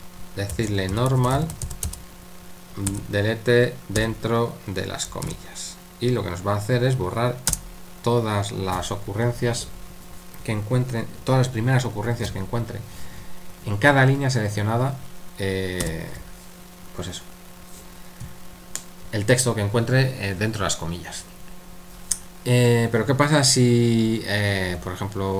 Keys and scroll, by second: 0.3-2.9 typing, 4.0 typing, 5.2 typing, 7.5 typing, 15.8 u, 24.8-25.3 typing.